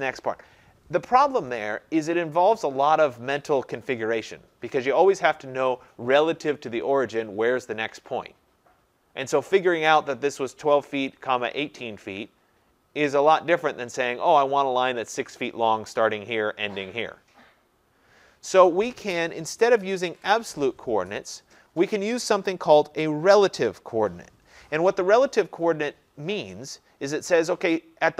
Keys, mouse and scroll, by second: 20.2 ctrl+z.